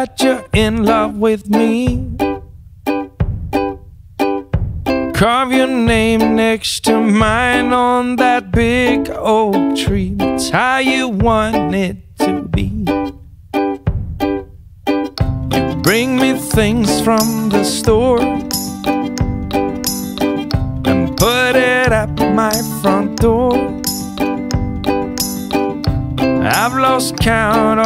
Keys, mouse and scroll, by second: 0.4 click, 4.0 click, 7.6 click, 9.7 click, 10.1-11.3 typing, 15.4 click, 17.2 click, 24.3 click, 27.4 click.